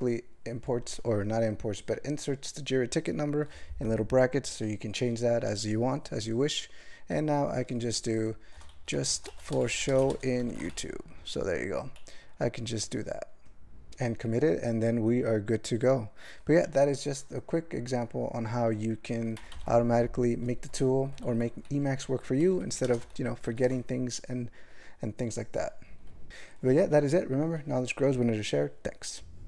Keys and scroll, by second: 8.5-10.7 typing, 16.2-16.9 typing, 21.7 q, 22.4 ctrl+l, 22.8 ctrl+space, 23.0 ctrl+alt+b, 23.5 ctrl+g.